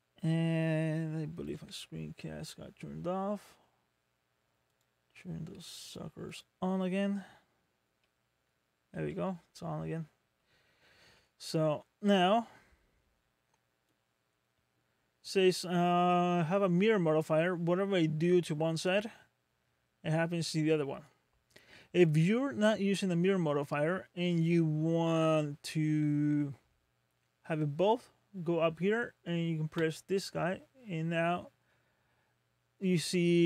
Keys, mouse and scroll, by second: 1.5 n, 7.0 scroll down 1, 7.6 scroll up 1, 8.0 middle click, 9.0 middle click, 9.5 shift+middle click, 10.5-11.1 scroll up 3, 11.1 middle click, 13.9 click, 22.3-22.8 scroll down 3, 23.0 scroll up 2, 29.8 click.